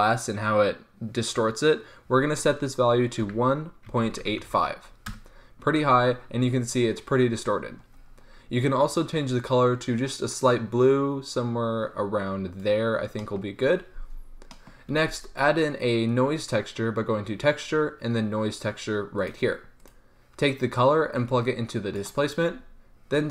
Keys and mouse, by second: 15.0 shift+a, 20.0-23.3 drag.